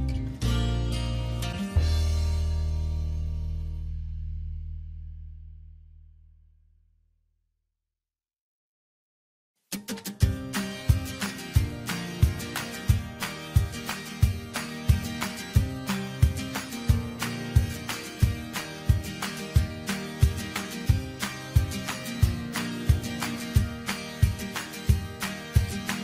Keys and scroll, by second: 18.9 ctrl+j, 24.4 ctrl+t.